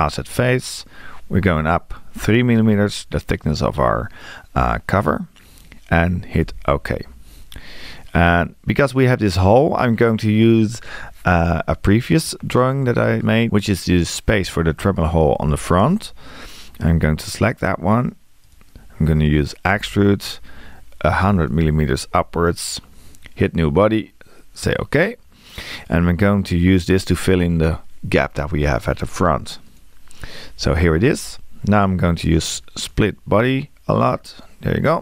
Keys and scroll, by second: 6.5 Return, 19.7 e.